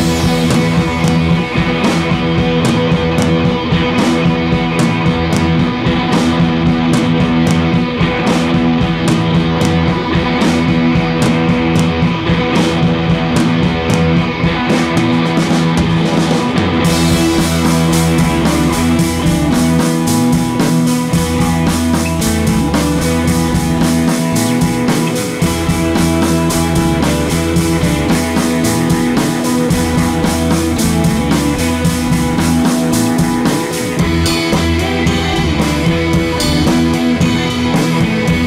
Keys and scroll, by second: 5.8 1, 9.8 Return, 15.4 d.